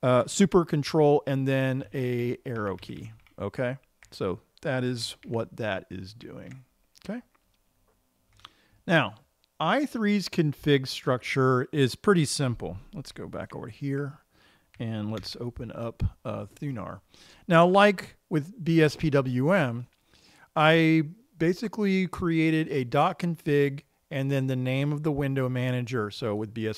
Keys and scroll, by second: 2.3 ctrl+super+Right, 3.1 ctrl+super+Left, 3.3 ctrl+super+Left, 3.4 ctrl+super+Left, 3.7 ctrl+super+Left, 5.7 super+q, 13.9 super+2, 15.7 super+f.